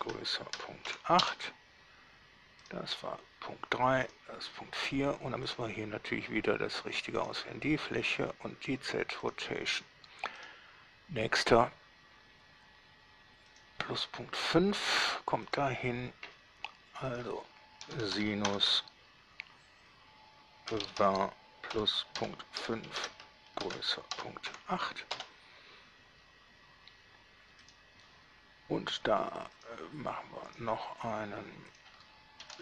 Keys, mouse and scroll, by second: 0.0-1.1 typing, 1.4 Return, 2.8 middle drag, 4.3 middle click, 5.7 click, 7.4 click, 8.3 click, 9.4 click, 10.6 middle click, 13.8 click, 15.7 drag, 17.4 click, 18.1 s, 18.2 i, 18.4 n, 18.7 shift+8, 21.0 v, 21.0 a, 21.2 r, 22.4-24.7 typing, 25.4 Return, 27.8 click, 29.8 click, 30.7 click, 32.0 click.